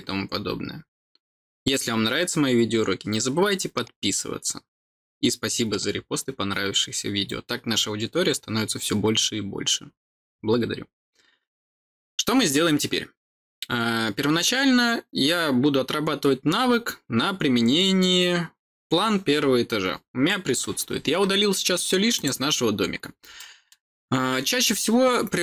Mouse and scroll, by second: 22.1 click, 22.9 scroll down 2, 23.3 middle click.